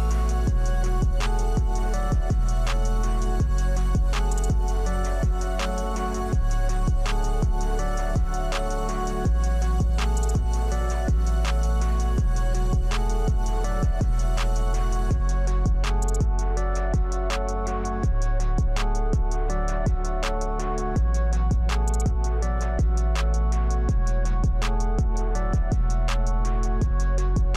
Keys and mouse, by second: 0.1 click, 1.8 middle click, 4.2 s, 5.9 click, 7.5 e, 8.6 f, 8.7 click, 9.0 Tab, 9.4 middle click, 9.9 KP_1, 10.6 click, 11.0 click, 12.0 click, 12.4-13.0 middle drag, 13.1 Tab, 13.5 Tab, 13.8 shift+z, 14.6 click, 14.9 click, 15.4-15.8 middle drag, 15.9 KP_1, 16.6 shift+middle drag, 19.5 shift+z, 20.2 KP_0, 22.0 click, 23.5 click, 26.5 click.